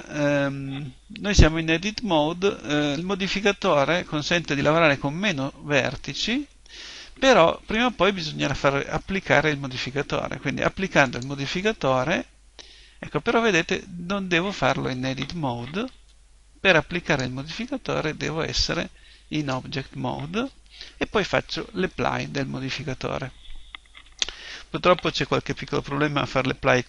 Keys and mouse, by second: 11.0 click.